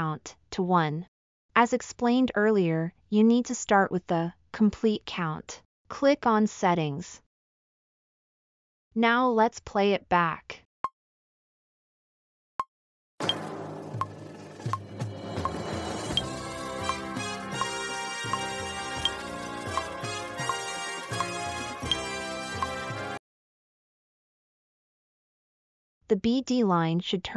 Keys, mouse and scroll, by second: 7.8-8.8 middle drag, 10.1 typing, 26.0 middle drag.